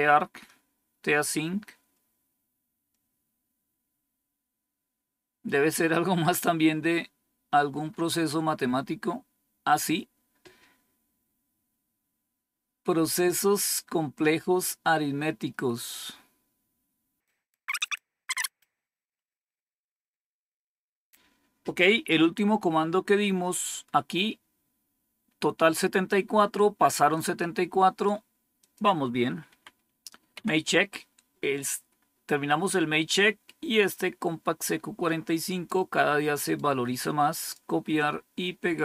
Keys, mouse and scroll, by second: 1.9 scroll down 1, 2.8 scroll down 1, 7.7-18.6 scroll up 2, 18.6-24.1 scroll up 1, 24.1-25.1 scroll up 1, 25.1-27.1 scroll up 1, 27.1 click, 28.5 click, 29.4 Home, 30.3 End, 33.8-35.6 drag, 36.3 right click, 37.3 click.